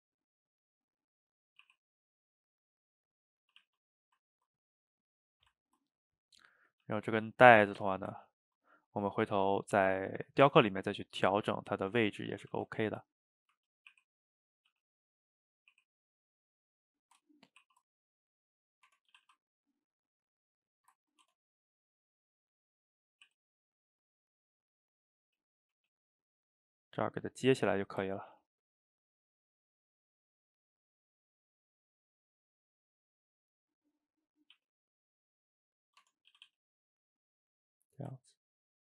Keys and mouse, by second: 1.6 r, 2.4-3.5 middle drag, 3.5 a, 3.6 a, 3.9-5.4 middle drag, 5.4 shift+right click, 5.6-6.0 ctrl+middle drag, 6.0 click, 6.1-6.9 middle drag, 6.9 g, 7.6 a, 7.8 a, 8.2-9.6 ctrl+middle drag, 9.6 drag, 10.7-11.4 middle drag, 11.4 shift+right click, 11.6-11.9 ctrl+middle drag, 11.9 Tab, 12.3 a, 12.4 a, 12.7 ctrl+right drag, 13.2-14.0 middle drag, 14.0 r, 14.7 g, 15.8 r, 17.6 ctrl+t, 18.9 Tab, 19.2 a, 19.3 a, 19.5-20.6 middle drag, 20.6 click, 20.8 ctrl+shift+middle click, 21.2 Tab, 21.7-22.3 middle drag, 22.3 click, 23.0 click, 23.3 e, 25.6 shift+click, 25.9 g, 27.1-28.3 middle drag, 28.3 ctrl+t, 33.5 middle click, 34.3 click, 34.6 g, 35.8 middle drag, 36.0 Tab, 36.3 a, 36.5 a, 36.8-38.8 middle drag.